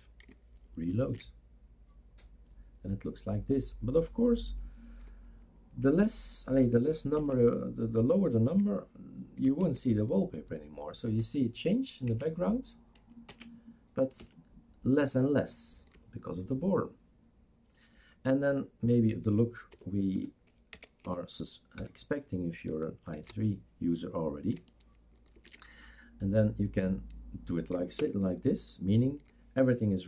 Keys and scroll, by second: 1.1 shift+super+r, 7.2 super+Right, 9.6 alt+Right, 11.2 alt+Right, 12.1 alt+Right, 13.3 alt+Right, 14.2 alt+Right, 19.7 BackSpace, 20.1 0, 20.7 Down, 21.0 BackSpace, 21.8 0, 23.1 ctrl+s, 25.5 shift+super+r, 28.0 super+Return.